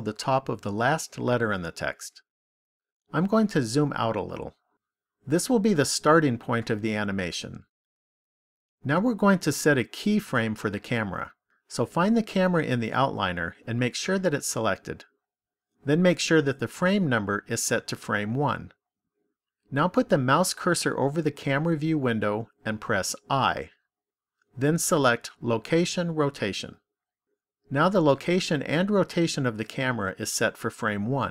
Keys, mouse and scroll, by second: 3.5-6.2 scroll down 1, 6.2 middle click, 13.4 click, 23.2 i.